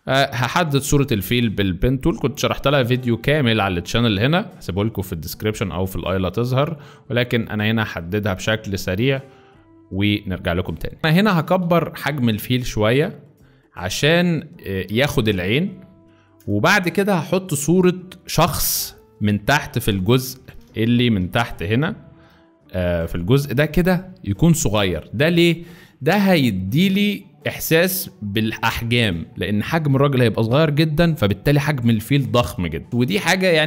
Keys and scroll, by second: 11.1 ctrl+t, 16.5 Return, 19.9 3, 21.0 ctrl+z, 22.1 F3.